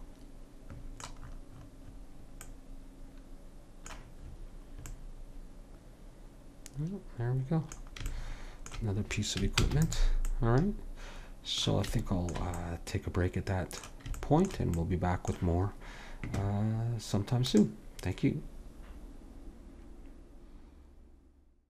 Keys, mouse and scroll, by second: 9.8 ctrl+s.